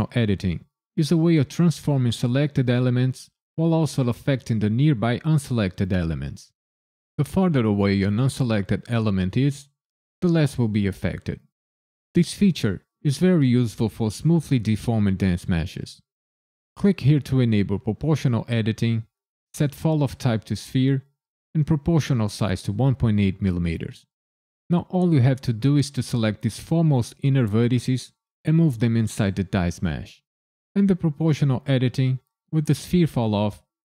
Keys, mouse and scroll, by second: 16.8 click, 18.9 click.